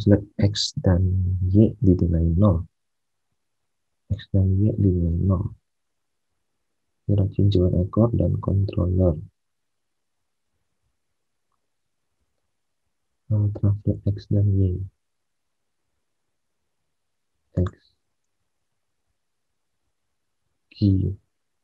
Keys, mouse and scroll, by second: 10.6 alt+Tab, 12.2 alt+Tab, 13.7 alt+Tab, 18.2 alt+Tab.